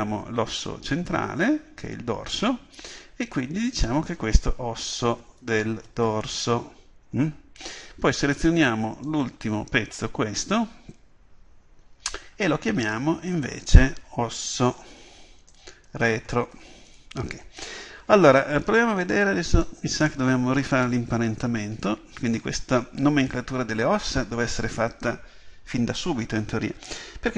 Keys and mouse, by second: 3.8-8.7 drag, 9.1 right click, 12.9-27.3 drag.